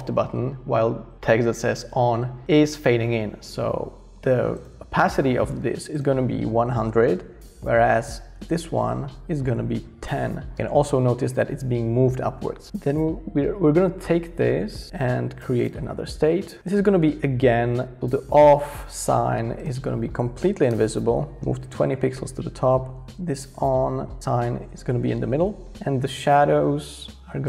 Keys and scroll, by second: 6.4-7.4 typing, 10.0-12.5 typing, 20.4 typing, 20.7 Return, 21.4 shift+Up.